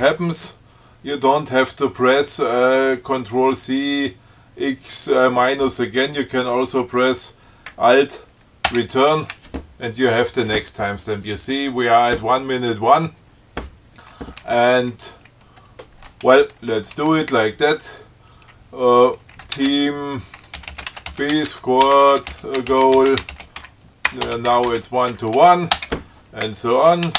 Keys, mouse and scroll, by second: 9.0 alt+Return, 19.6-26.8 typing.